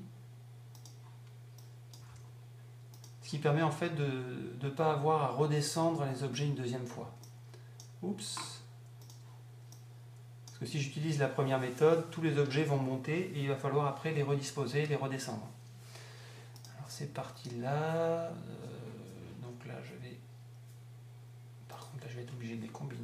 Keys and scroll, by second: 2.0 Up.